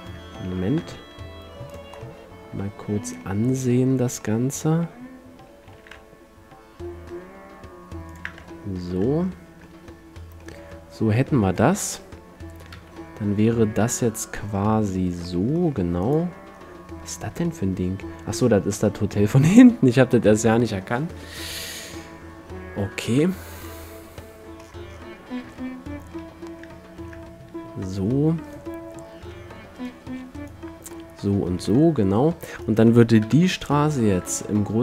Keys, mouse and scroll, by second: 0.7 g, 2.1-6.2 drag, 5.9 r, 8.3-10.1 drag, 9.5-10.1 middle drag, 11.5 a, 12.9 KP_1, 17.5-20.5 middle drag, 22.0 KP_2, 23.2 KP_5, 24.0-26.6 middle drag, 28.7-32.3 middle drag, 29.4 a, 33.4 KP_7.